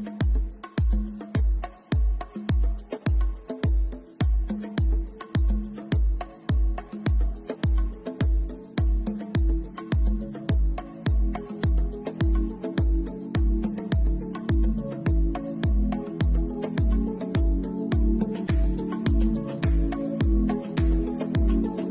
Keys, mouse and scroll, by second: 0.7 shift+middle click, 1.1 scroll down 1, 2.5 scroll down 1, 2.8 click, 4.2 click, 5.2 l, 6.9 right click, 7.9 Tab, 10.0 l, 11.6 middle click, 14.5 middle click, 14.6 shift+middle click, 14.8 shift+middle click, 15.1 middle click, 16.0 middle click, 16.4-17.0 scroll up 5, 16.9 middle click, 17.9 middle click, 17.9 scroll up 1, 18.3 Tab, 19.6 alt+click, 20.8 middle click.